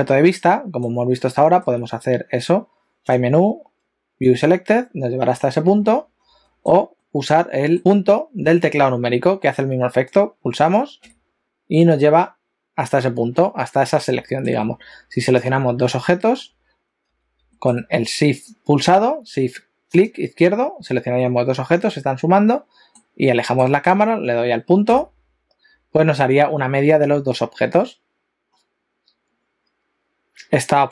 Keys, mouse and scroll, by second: 0.1 shift+middle click, 1.2 shift+middle click, 5.8-6.3 scroll down 10, 6.5 shift+middle click, 7.0 shift+middle click, 11.0 KP_Decimal, 13.1-14.0 scroll down 9, 14.3 shift+middle click, 15.3 shift+click, 15.8 shift+middle click, 17.1 a, 17.6 shift+middle click, 18.6 click, 20.0 shift+click, 22.4 shift+middle click, 23.4 shift+middle click, 24.9 KP_Decimal, 28.6-29.4 scroll down 3, 29.4-30.7 scroll up 1, 30.7 click.